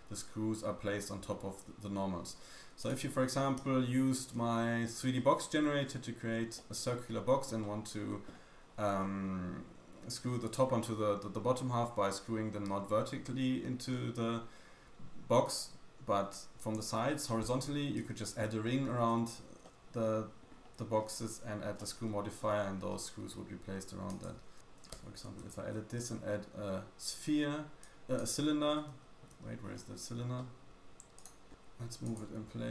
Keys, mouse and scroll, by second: 3.1-3.6 scroll down 2, 3.6 Tab, 5.1 middle click, 6.5 middle click, 7.6 middle click, 8.3-8.7 scroll up 1, 8.7-9.0 scroll down 2, 8.9-9.5 scroll up 5, 9.5-10.6 scroll down 4, 18.6 middle click, 19.6 middle click, 20.5-21.0 scroll down 2, 20.9-21.4 scroll up 2, 21.4-21.8 scroll down 2, 21.8 middle click, 22.9 middle click, 23.6-24.0 scroll up 1, 24.0 click, 24.9 Tab, 25.5 shift+a, 28.7 g, 29.6-30.3 scroll down 2, 30.3 scroll down 2, 30.4 middle click, 30.7-31.2 scroll up 3, 30.7 g, 30.7 y, 31.5 scroll down 1, 31.5 middle click, 31.5-32.1 scroll up 4, 31.5 g, 31.5 s, 32.5-32.7 scroll down 1.